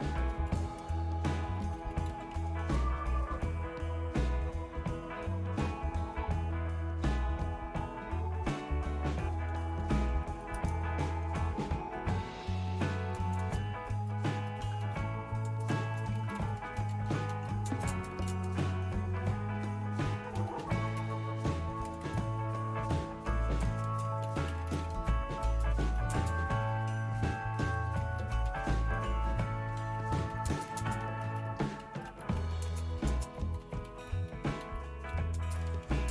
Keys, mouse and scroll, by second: 2.2 typing, 2.4 Tab, 2.5 Return, 16.0-18.2 typing, 19.8-22.3 typing, 24.0-26.2 typing, 28.3-36.1 typing.